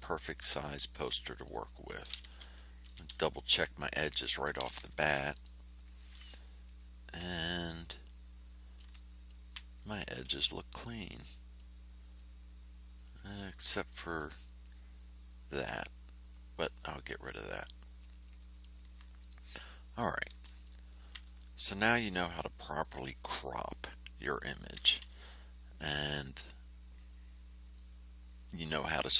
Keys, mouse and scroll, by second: 1.4 click, 2.8 5, 4.4 click, 5.3 click, 6.6-6.9 ctrl+scroll up 2, 7.2-8.9 ctrl+drag, 9.2 ctrl+scroll down 2, 9.7 ctrl+click, 10.7 ctrl+scroll up 2, 11.5-12.3 ctrl+scroll down 4, 12.9-13.5 ctrl+scroll up 4, 13.8 ctrl+middle click, 14.6-15.1 ctrl+scroll up 4, 16.6-17.4 ctrl+scroll down 4, 18.2-18.9 ctrl+scroll up 4, 19.1 ctrl+middle click, 20.0 click, 20.6-21.2 ctrl+scroll down 2, 21.3 ctrl+middle click, 22.3 ctrl+scroll down 2, 27.7 middle click, 28.2 click.